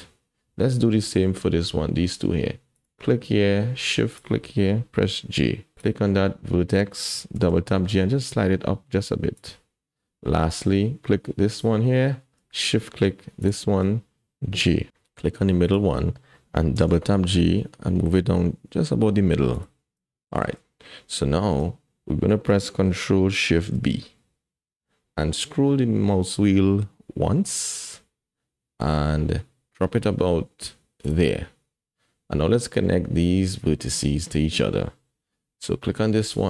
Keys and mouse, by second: 1.1 shift+click, 2.8 click, 5.2 j, 7.3 g, 11.5 click, 13.4 shift+click, 14.6 j, 16.9 g, 20.1 shift+click, 21.3 shift+click, 23.6 ctrl+shift+b.